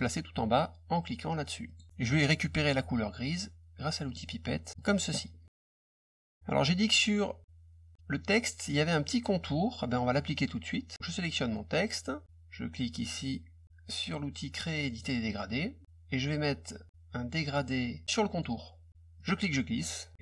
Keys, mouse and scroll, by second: 1.6 click, 4.0 click, 4.7 click, 5.6 click, 10.9 click, 14.8 click, 18.3 click, 19.1 click, 20.1 middle click, 20.1-20.2 scroll up 2.